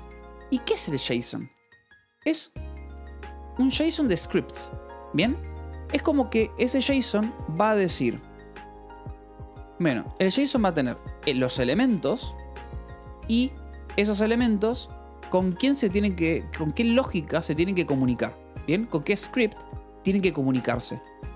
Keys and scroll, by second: 6.2 Escape, 7.3-9.3 typing, 7.9 Return, 10.5-12.8 typing, 14.1 e, 15.3 space, 18.4-21.3 typing.